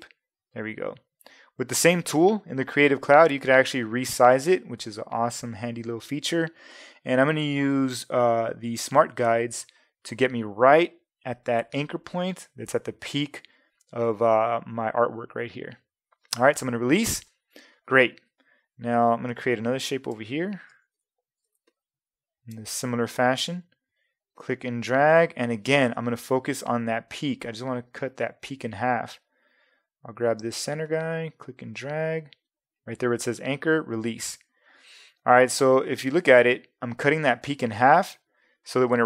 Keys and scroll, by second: 18.9 space, 20.7 super+-, 21.4 super+space.